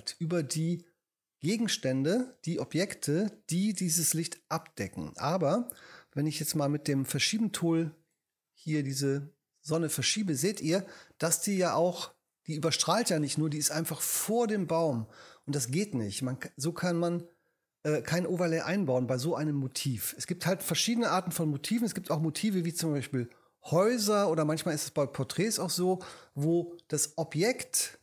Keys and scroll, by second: 6.7 v.